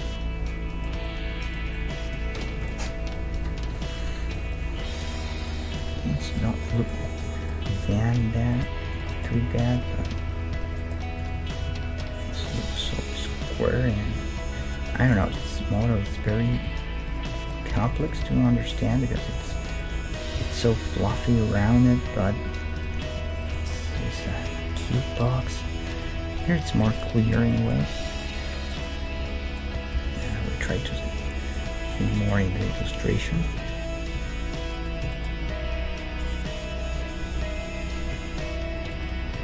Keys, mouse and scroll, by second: 3.3 ctrl+2, 3.8-7.5 middle drag, 7.9 Tab, 8.2-10.7 drag, 9.3 g, 11.2 click, 11.7 g, 12.5-14.6 right drag, 13.6 g, 16.7 g, 17.0 right click, 18.2 g, 19.2 right click, 19.5-21.9 middle drag, 20.3 g, 21.5-23.2 right drag, 21.7 g, 23.5-30.5 middle drag, 30.0 KP_1, 31.0 middle click, 32.0-33.7 right drag, 33.3 KP_1, 33.7 middle click, 34.2 g, 35.1-37.1 middle drag, 35.6 g, 37.3-39.4 right drag, 38.2 g.